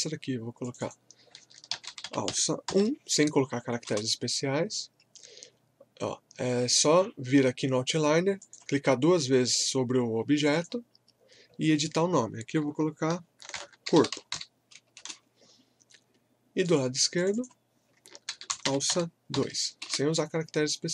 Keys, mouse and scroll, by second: 1.5-3.2 typing, 3.9 Return, 8.4 click, 13.4-14.8 typing, 15.0 Return, 16.6 click, 18.0-19.8 typing, 19.8 Return.